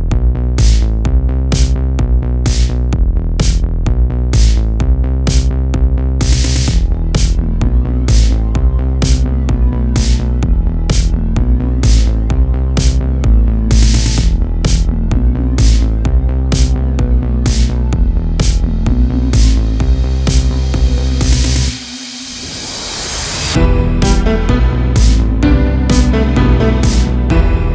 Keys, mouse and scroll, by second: 4.2 click, 5.1 click, 5.6 click, 10.7 scroll down 4, 11.0 a, 11.2 a, 12.1-14.1 shift+middle drag, 14.1 click, 14.9 click, 16.4 click, 17.5 click, 19.0 a, 19.2 a, 20.1-20.9 scroll up 3, 20.9 scroll down 2, 21.6-21.9 scroll up 1, 22.4-23.0 shift+middle drag, 23.0-23.7 scroll up 1, 23.7 click, 25.4 g, 27.2 a, 27.4 a.